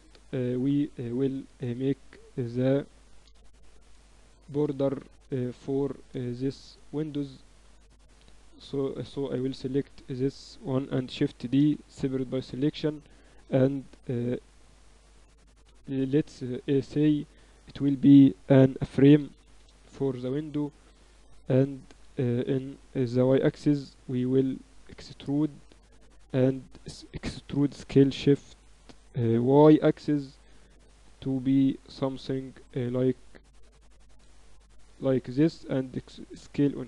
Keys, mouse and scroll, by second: 1.3 ctrl+KP_1, 1.8 KP_6, 2.0 z, 2.7 KP_8, 6.4-8.1 middle drag, 8.1-11.1 right drag, 8.3 Tab, 10.9 shift+d, 11.4 right click, 11.6 p, 12.4 Tab, 15.5 ctrl+Up, 16.9-19.5 drag, 21.0 Tab, 21.3 a, 21.5 a, 21.9 a, 23.8 e, 25.9 a, 26.1 a, 27.3 e, 35.8 s.